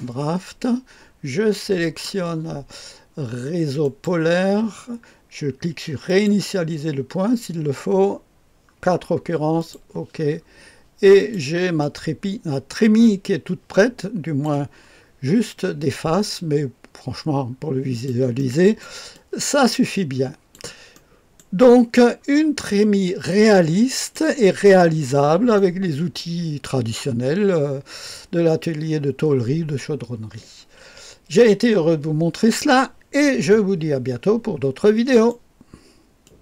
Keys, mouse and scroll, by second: 1.8 click, 3.8 click, 6.1 click, 6.6 click, 8.2-9.6 scroll down 1, 9.6 click, 10.2-11.2 scroll down 1, 11.2 click, 11.8-14.5 drag, 14.8-15.2 scroll up 1, 15.8-18.1 drag, 18.4 click, 18.4 right click, 19.0-20.6 right drag, 19.1-21.4 drag, 20.9-22.1 right drag, 22.2-22.8 scroll down 1, 22.8-25.0 drag, 22.8-24.2 right drag, 25.6-26.9 right drag, 35.1 right click, 36.2 click.